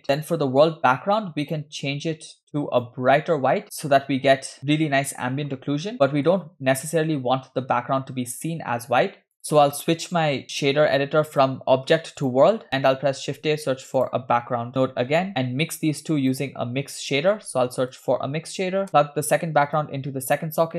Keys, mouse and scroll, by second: 0.1 click, 1.5 click, 3.6 shift+middle click, 4.8-5.5 scroll up 1, 5.9 click, 5.9 scroll down 1, 6.0 shift+middle click, 11.3-12.4 drag, 12.7 middle click, 12.7 scroll down 1, 13.3 shift+a, 17.3 shift+a, 19.8-20.6 drag.